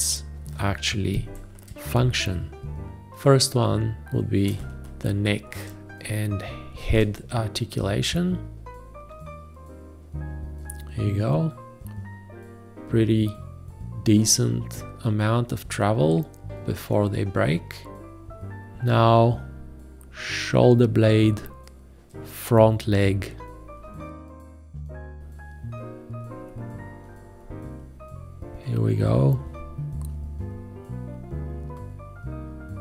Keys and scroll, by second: 1.2 g, 4.5 space.